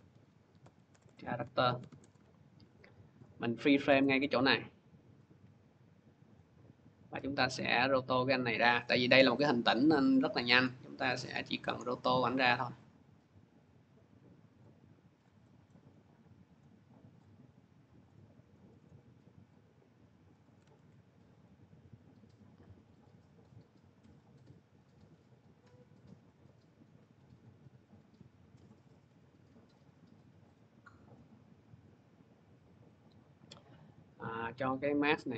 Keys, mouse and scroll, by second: 0.0-1.5 typing, 0.3 scroll, 1.8 Return, 7.8 right click, 7.8 click, 7.8 middle click, 8.6 click, 9.3 click, 9.8 click, 10.4 click, 11.1 click, 11.8 click, 12.4 click, 13.0 click, 13.7 click, 14.4 click, 15.1 click, 15.5 scroll, 16.4 click, 17.0 click, 17.9 click, 18.7 click, 19.3 click, 20.2 click, 20.6 ctrl+z, 21.3 click, 22.5 click, 23.1 click, 24.0 click, 24.6 click, 25.4 click, 26.1 click, 26.9 click, 27.7 click, 28.7 click, 29.5 click, 30.3 click, 31.0 click, 31.8 click, 32.3-33.3 scroll, 33.7 click, 34.7 click.